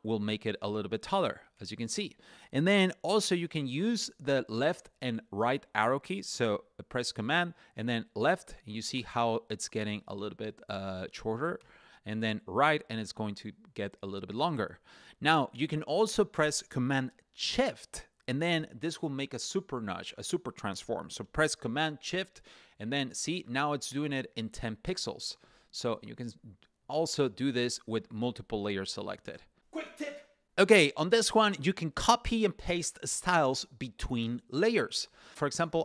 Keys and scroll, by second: 1.2 super+Up, 1.8 super+Up, 7.3 super+Left, 11.2 super+Right, 21.9 shift+super+Up, 22.2 shift+super+Up, 22.8 shift+super+Down, 23.0 shift+super+Down, 23.2 shift+super+Down, 23.4 shift+super+Left, 23.8 shift+super+Left, 24.0 shift+super+Left, 24.2 shift+super+Left, 24.5 shift+super+Right, 24.7 shift+super+Right, 27.4 shift+super+Up, 28.0 shift+super+Up, 28.4 shift+super+Down, 28.6 shift+super+Down, 29.4 shift+super+Left, 29.5 shift+super+Left.